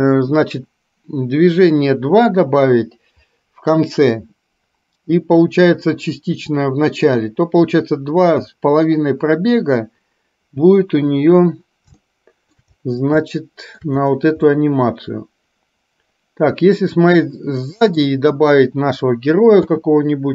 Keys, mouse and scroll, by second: 12.1-12.7 shift+middle drag, 13.4-13.8 shift+middle drag, 14.7-18.1 middle drag, 19.7 space.